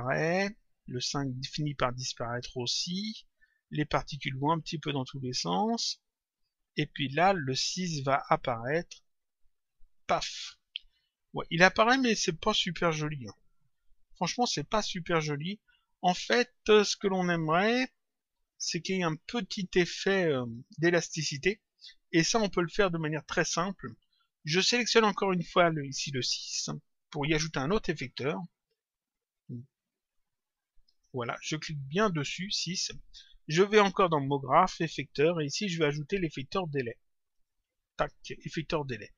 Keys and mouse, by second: 11.5 click, 22.9 click, 24.9 click, 30.8 click, 31.9 click, 34.0 click, 37.3 click.